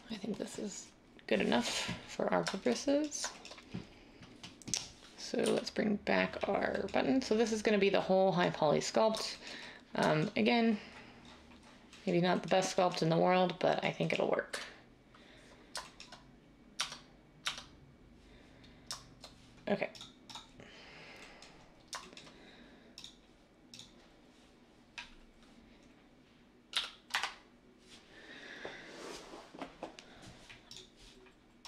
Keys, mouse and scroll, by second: 5.4 /, 14.5 9, 16.7 Tab, 17.4 Tab, 26.7-27.1 typing.